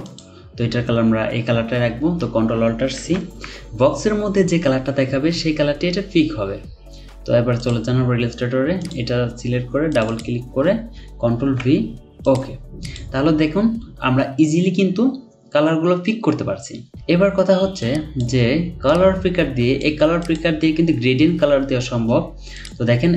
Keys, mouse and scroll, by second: 2.9 typing, 10.1 double click, 11.4 typing.